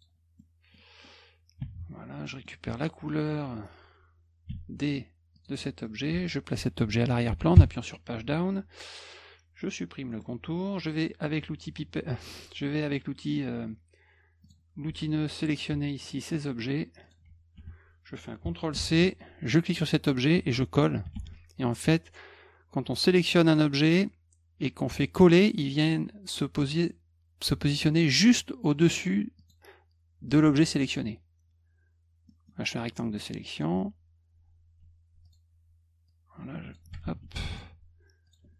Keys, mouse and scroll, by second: 0.4 middle click, 2.2 middle click, 4.5 d, 5.3 click, 5.8 middle click, 6.1 F1, 10.1 middle click, 14.4 click, 15.5 click, 16.0 shift+click, 17.0 shift+click, 17.5 F1, 18.7 ctrl+c, 19.5 click, 21.1 ctrl+v, 23.4 click, 29.4 click, 32.3 middle click, 32.8 click, 35.2 click, 36.1-36.7 drag, 37.0 ctrl+z, 37.5 shift+click, 38.3 shift+click.